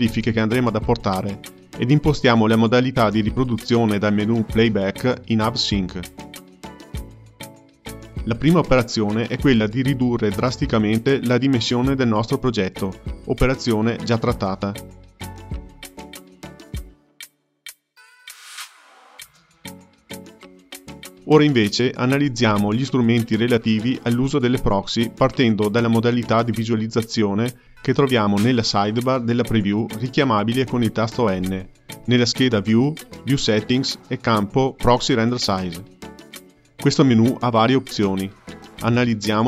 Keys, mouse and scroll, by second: 3.3 click, 10.2-13.4 drag, 14.6 space, 19.0-20.5 drag, 20.5 KP_0, 31.0 n, 32.6 click, 35.2-39.4 drag.